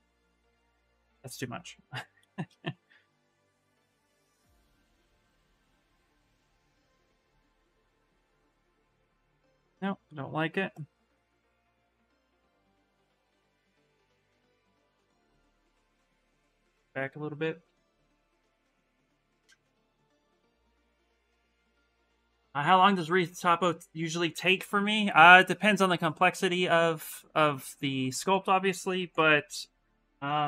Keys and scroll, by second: 0.6 ctrl+z, 6.0 s, 9.1 ctrl+z, 9.6 ctrl+z, 13.1 s, 16.2 s, 29.8-30.4 typing.